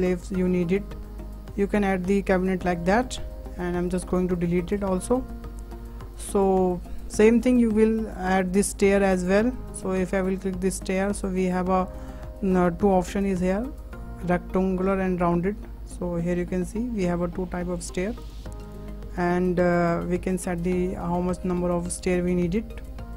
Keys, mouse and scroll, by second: 1.0 scroll up 2, 1.1-2.4 shift+middle drag, 2.4-2.7 scroll down 2, 2.7 click, 3.1 Tab, 3.2 Tab, 3.7 Tab, 3.9-4.4 scroll down 1, 4.4 click, 5.0-5.6 shift+middle drag, 5.6 Delete, 8.5 click, 9.0-9.4 scroll up 3, 9.4-10.6 shift+middle drag, 10.6-11.0 scroll up 1, 11.0 shift+middle click, 11.9-15.0 drag, 16.1-16.4 middle drag, 16.4 scroll up 4, 16.8 shift+middle click, 17.2-17.6 scroll down 2, 18.2-21.2 drag, 21.2-21.5 scroll down 3, 21.5-21.9 middle drag, 21.9-22.9 scroll down 3, 22.9-23.1 drag.